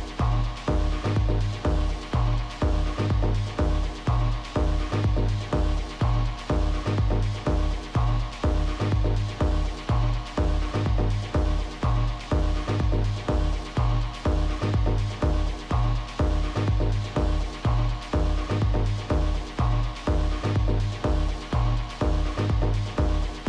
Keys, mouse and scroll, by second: 1.5 a, 2.4 KP_3, 3.1 a, 3.8 z, 4.2 middle click, 5.3-6.9 middle drag, 6.8 r, 12.8-16.7 middle drag, 14.0 z, 21.4 ctrl+z, 22.5-23.4 middle drag.